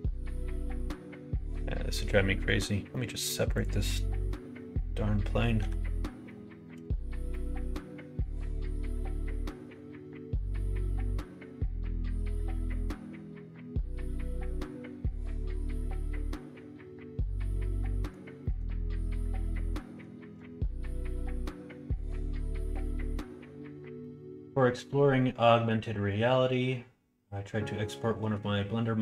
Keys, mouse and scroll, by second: 3.0 click, 5.8 l, 6.7 p, 17.7 middle click, 18.5 middle click, 19.5 middle click.